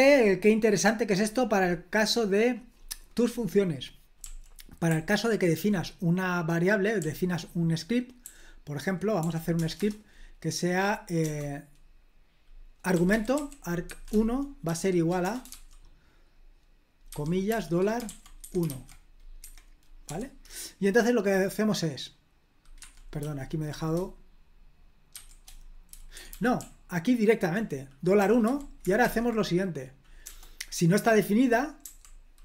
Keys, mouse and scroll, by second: 0.0-1.1 scroll down 1, 2.4 click, 4.2-5.5 typing, 7.0 typing, 8.2-9.2 typing, 9.6 Return, 9.8 Return, 11.2 BackSpace, 12.9-15.5 typing, 17.1-18.7 typing, 20.0 o, 22.8 Escape, 23.2 k, 25.7-30.2 typing.